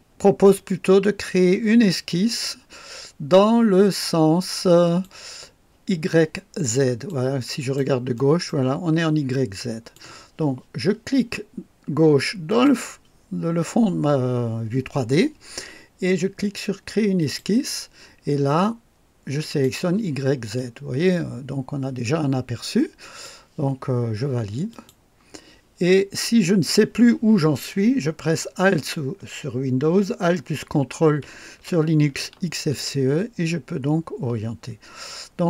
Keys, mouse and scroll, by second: 6.7 click, 7.5 click, 8.1 right click, 9.2-10.1 drag, 12.4 click, 17.1 click, 19.4 click, 20.5-23.4 drag, 24.7 click, 32.7-35.4 ctrl+alt+drag.